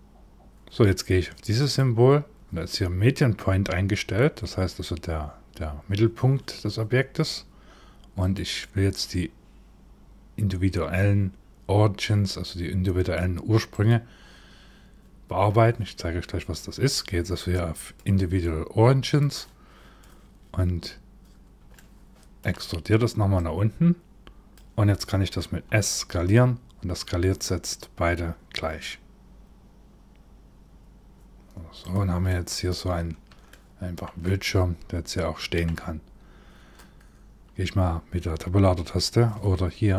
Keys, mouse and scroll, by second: 1.2 click, 7.8 click, 17.4 click, 21.5 shift+middle click, 23.0 click, 25.3 s, 31.9 middle click, 32.5-32.9 scroll down 1, 33.1 shift+middle click, 33.1 scroll down 1, 33.8 middle click, 39.6 click.